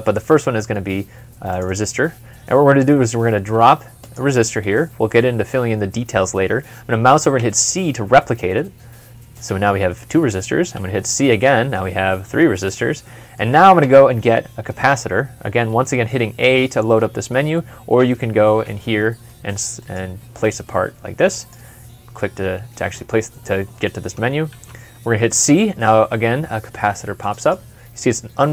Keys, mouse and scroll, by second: 1.5 r, 1.7 double click, 7.2 c, 10.6 typing, 11.3 middle click, 13.6 a, 18.1 Escape, 24.3 c, 27.2 double click.